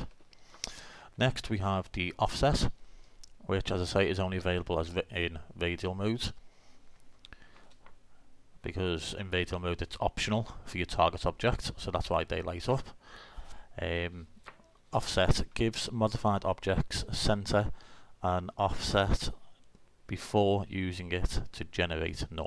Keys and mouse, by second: 0.8 middle click.